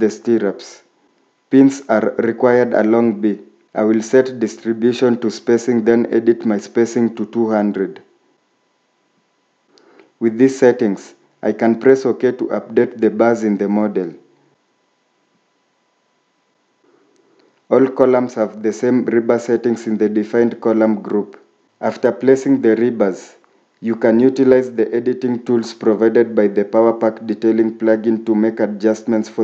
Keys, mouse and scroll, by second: 7.2-8.2 typing, 20.2 scroll down 1, 26.8-27.2 scroll up 1.